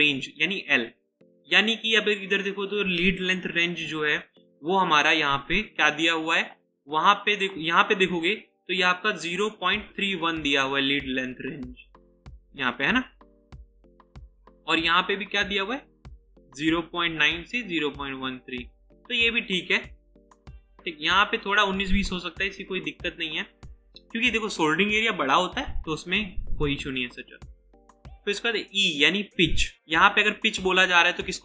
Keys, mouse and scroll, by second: 19.2 double click.